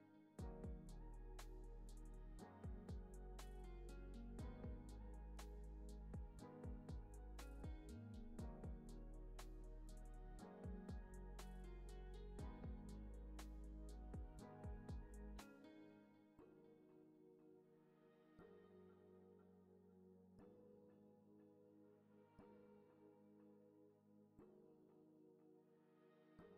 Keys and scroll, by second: 18.7 space, 24.6 space, 24.9 super+s.